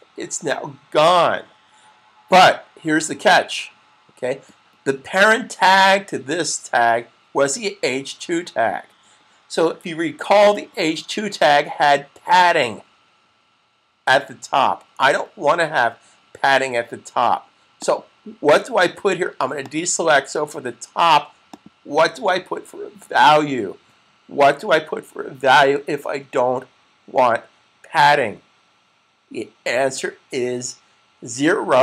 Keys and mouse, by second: 17.6 click, 31.3 0.